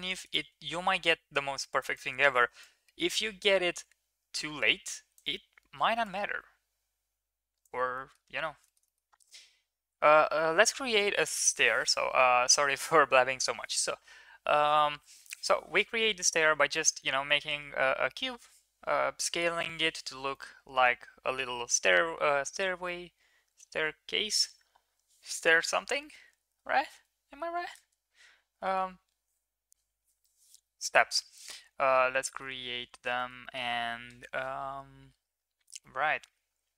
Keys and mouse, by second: 0.3-2.0 shift+right drag, 2.6-5.1 shift+right drag, 6.1-7.6 shift+right drag, 7.9 middle click, 8.6 shift+middle click, 8.8 middle click, 10.3 shift+middle click, 16.7 middle click, 20.3-21.9 middle drag, 22.8-23.5 middle drag, 27.7 space, 28.6 space, 31.4 middle click, 32.2 shift+middle drag, 33.1 shift+middle drag, 33.4 middle click, 35.8-36.7 middle drag.